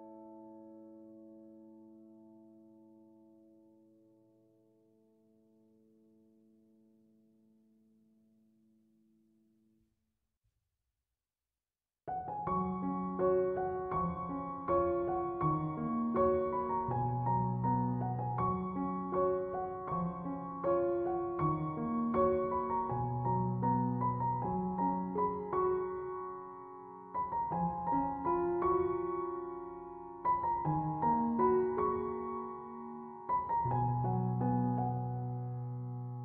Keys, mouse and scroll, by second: 26.7 2, 27.0 Return, 30.1 2, 30.3 Return, 35.6 ctrl+7.